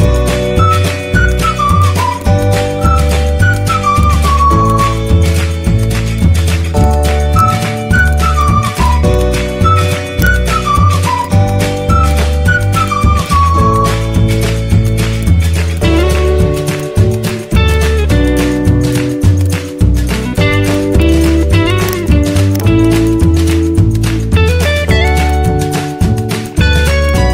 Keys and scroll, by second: 2.7 z, 13.7 z, 25.6 z.